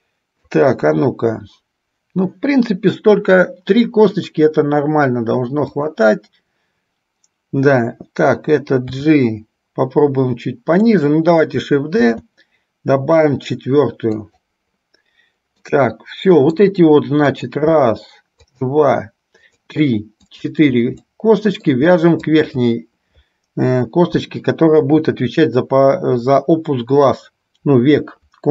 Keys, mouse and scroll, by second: 1.0 KP_1, 5.8 click, 9.0 g, 12.2 shift+d, 15.7-16.8 middle drag, 17.5 click, 18.7 shift+click, 19.7 shift+click, 20.5 shift+click, 21.2 middle click, 22.5 shift+click, 24.8 KP_3.